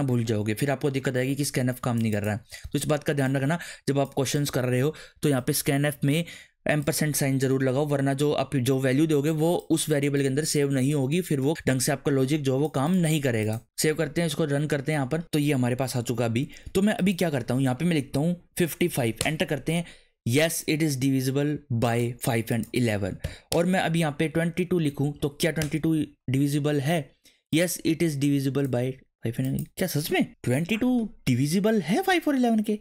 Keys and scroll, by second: 18.5 5, 18.8 5, 19.2 Return, 23.4 Up, 23.5 Return, 24.9 2, 25.1 2, 25.6 Return.